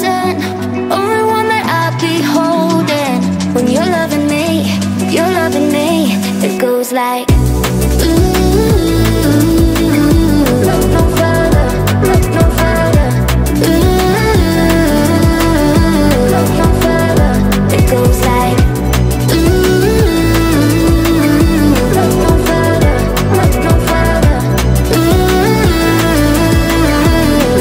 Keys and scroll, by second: 1.0 Down, 18.2-19.5 typing.